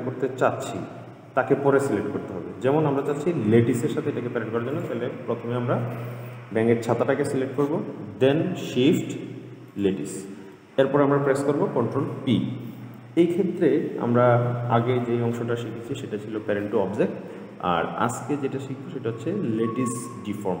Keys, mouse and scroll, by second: 3.2 click, 5.0 click, 9.9 shift+click, 12.3 ctrl+p.